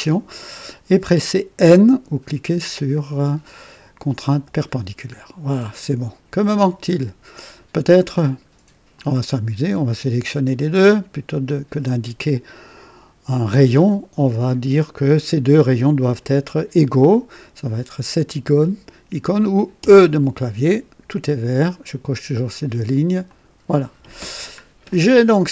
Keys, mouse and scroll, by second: 4.2 n, 5.1 scroll down 2, 5.7 right click, 6.5-6.8 scroll down 1, 8.9 click, 11.6 click, 19.7 e, 19.7 e, 23.2 click, 24.2-24.6 scroll down 2, 24.8-25.5 drag.